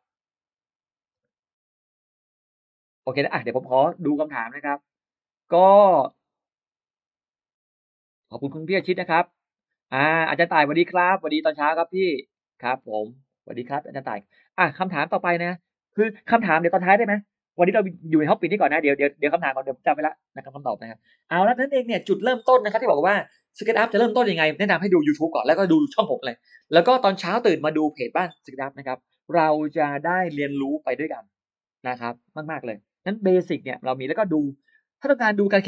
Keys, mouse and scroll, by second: 0.9 click, 2.1-8.2 drag, 9.3 middle click, 9.8 middle click, 10.8 middle click.